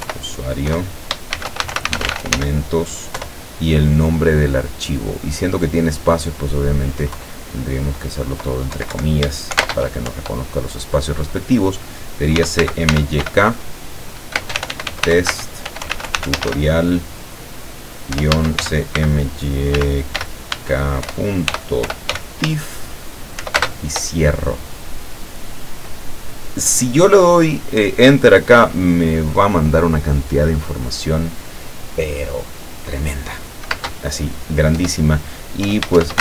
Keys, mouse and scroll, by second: 0.0-2.9 typing, 3.2 KP_Divide, 7.2 Left, 8.8 Right, 9.7 shift+space, 10.1 shift+End, 12.2-23.6 typing, 20.6 Caps_Lock, 33.8 space, 34.8 \, 35.7 BackSpace, 36.0 shift+\.